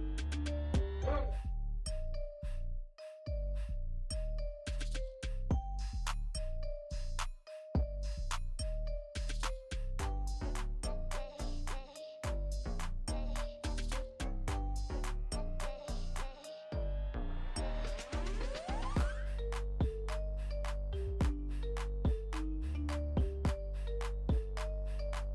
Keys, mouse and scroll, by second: 1.1-8.1 ctrl+drag, 8.1 alt+scroll down 1, 9.2 scroll down 1, 9.5 click, 11.4 Return, 14.1 click, 16.0 click, 18.1 ctrl+a, 19.0 ctrl+c, 19.8 click, 20.1 click, 22.5 click, 24.7 ctrl+v.